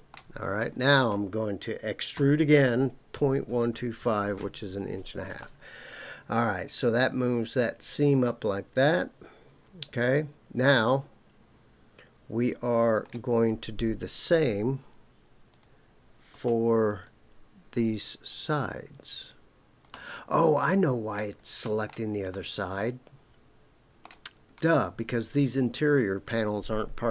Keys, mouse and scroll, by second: 0.5 scroll up 2, 2.1-4.0 typing, 4.3 KP_Enter, 5.4-13.1 middle drag, 15.5 click, 17.0-18.3 shift+drag, 19.1 shift+click, 20.6 middle click, 21.4 scroll down 1, 21.7 middle click, 22.3-24.1 middle drag.